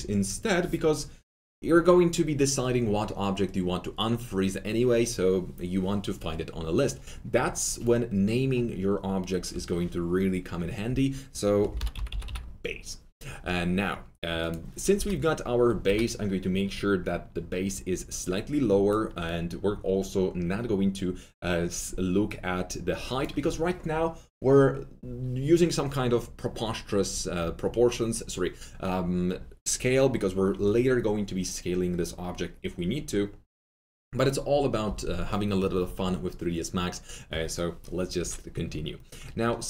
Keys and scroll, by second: 11.5-12.7 typing, 14.9 F3, 15.8 F3.